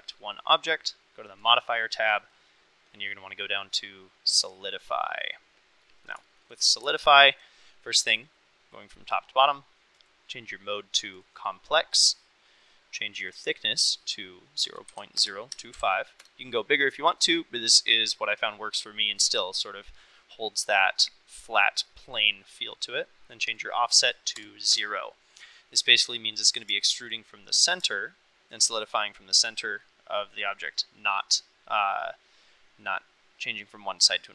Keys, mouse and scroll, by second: 1.4 click, 2.2-4.9 drag, 5.9 middle drag, 6.3 shift+middle click, 7.0 shift+middle drag, 10.1-11.3 drag, 13.4-22.7 drag, 23.5-25.5 drag, 25.7 click, 26.0 middle click, 26.9 shift+middle drag, 28.0-28.6 shift+middle drag, 29.5 middle click, 30.8 middle click.